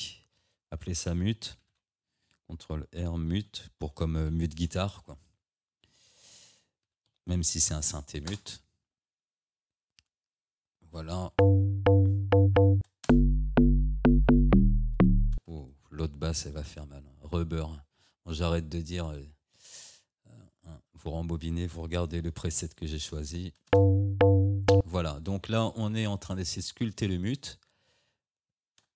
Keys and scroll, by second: 1.7 ctrl+r, 3.4 m, 6.5 BackSpace, 6.9 e, 8.3 Return, 11.3 space, 12.8 space, 15.4 space, 22.7 shift+Up, 23.8 space.